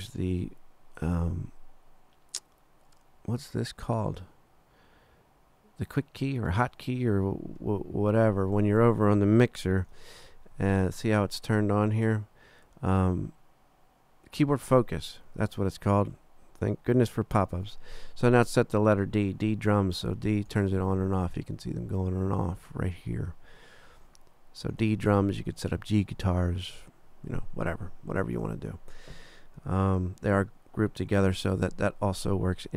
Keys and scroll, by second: 9.8 super+=, 20.0 d, 28.4 d, 31.3 super+=.